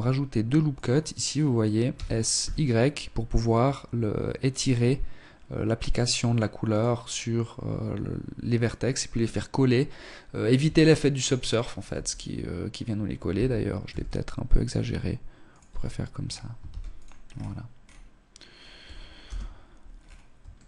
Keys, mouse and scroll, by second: 0.8 s, 9.4 Tab, 10.0-10.7 scroll down 1, 10.7 Tab, 10.7 scroll down 1, 11.6 scroll up 2, 12.2 s, 14.5 Tab, 15.0-15.4 scroll down 2, 15.6 ctrl+s, 16.1-16.6 scroll down 1, 16.6-17.8 scroll down 4, 17.8 scroll down 1, 18.1 KP_0, 18.8 scroll down 3, 19.4 shift+middle click, 19.8-20.6 scroll down 3.